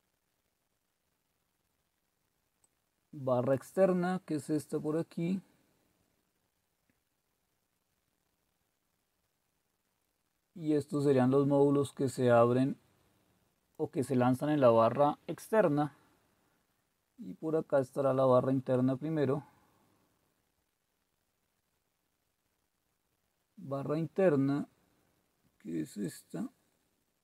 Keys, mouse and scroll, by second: 1.7-2.6 scroll down 1, 2.6-3.3 scroll down 1, 3.3-3.6 scroll down 1, 11.0-13.8 drag, 16.1-17.2 scroll up 1, 17.2-18.4 scroll up 1, 18.4-19.1 scroll up 1, 19.1-20.3 scroll up 1, 20.3-21.8 scroll up 1, 21.8-23.3 scroll up 1, 23.3-24.1 scroll up 1, 24.3-26.0 scroll down 1, 26.0-27.2 drag.